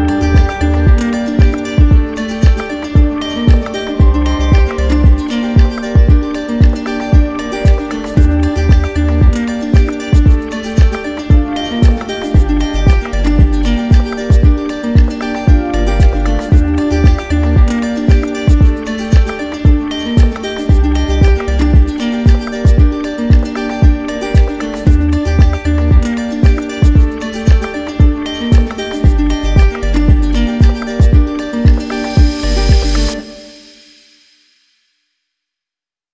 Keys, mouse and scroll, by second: 0.1 alt+click, 2.8 alt+click, 3.2 alt+click, 4.1 alt+click, 5.1 z, 7.4 click, 8.5 alt+click, 12.6 q, 13.6 click, 14.0 ctrl+click, 16.2 ctrl+click, 16.8 ctrl+click, 17.3 w, 19.9 click, 21.4 click, 22.0 alt+click, 22.1 alt+click, 22.4 ctrl+click, 24.1 ctrl+click, 24.5 ctrl+click, 27.0 click, 28.0 click, 28.6 alt+click, 29.6 alt+click, 30.3 alt+click, 31.4 ctrl+click, 32.0 ctrl+click, 33.2 ctrl+click, 33.7 ctrl+click.